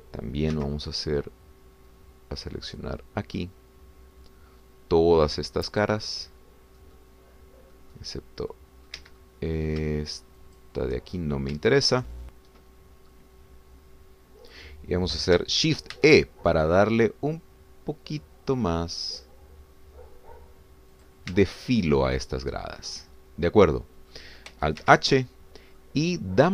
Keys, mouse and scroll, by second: 0.7 click, 1.5 c, 2.9-3.2 scroll up 1, 3.8-7.0 drag, 7.8 middle click, 8.7 middle click, 9.5 middle click, 10.0 Escape, 10.2 middle click, 11.4 shift+click, 12.1-12.5 shift+scroll up 2, 12.6 shift+click, 14.1-15.7 drag, 16.9 shift+e, 22.0 click, 22.4 Tab, 23.1 scroll down 2, 23.5-25.5 drag, 25.8 alt+h, 26.3-26.5 alt+scroll down 2.